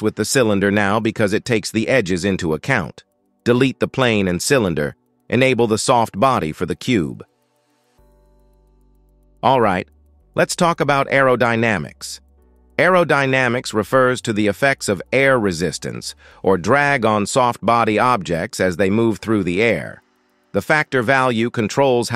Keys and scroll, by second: 1.1 space, 3.6 Delete, 4.4 Delete.